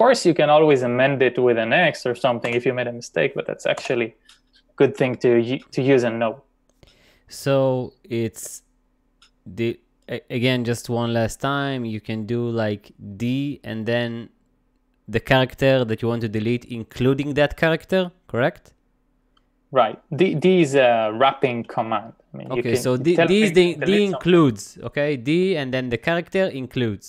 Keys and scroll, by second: 0.0 typing, 1.8-3.8 typing, 23.8 d.